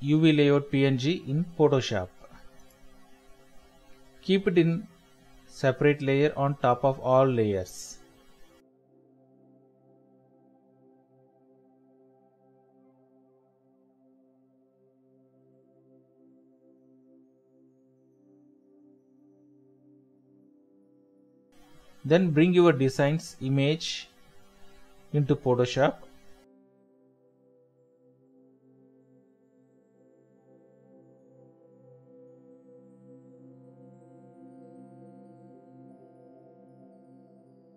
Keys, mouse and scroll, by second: 8.6 alt+Tab, 9.9 alt+Tab, 10.0 alt+Tab, 11.4 double click, 13.4 Escape, 16.8 shift+click, 17.4 ctrl+click, 18.5 ctrl+click, 19.9 ctrl+click, 30.3 Right, 30.6 Left, 30.9 shift+Right, 31.9-32.6 typing.